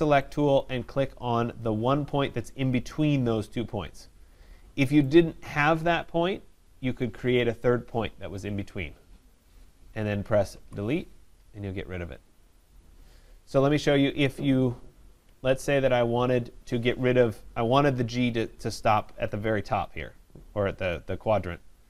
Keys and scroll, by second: 10.5 Delete, 13.6 ctrl+z.